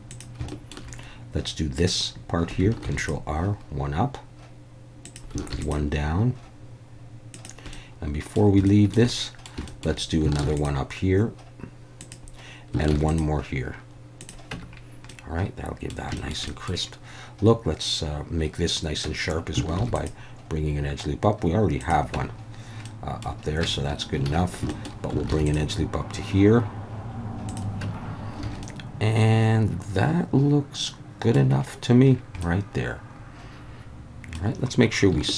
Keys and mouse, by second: 0.1 click, 0.5 shift+middle click, 2.8 ctrl+r, 5.0 click, 5.5 ctrl+r, 7.3 click, 7.7 middle click, 8.7 shift+middle click, 9.1 middle click, 9.7 shift+middle click, 10.4 ctrl+r, 12.0 click, 12.9 ctrl+r, 14.2 click, 14.5 Tab, 15.1-15.9 middle drag, 16.2 shift+middle drag, 16.5 middle click, 19.1 Tab, 19.8 ctrl+r, 21.8 click, 22.2 Tab, 22.9 middle click, 23.6 Tab, 24.3 alt+a, 24.7 shift+middle click, 25.3 ctrl+r, 27.5 click, 27.8 Tab, 28.4 alt+a, 28.6-31.3 middle drag, 32.4-34.4 middle drag.